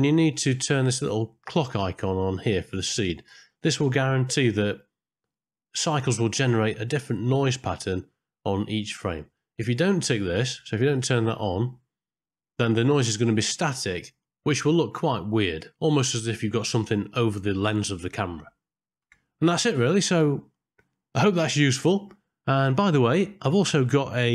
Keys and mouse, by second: 4.1 middle click, 10.9 click.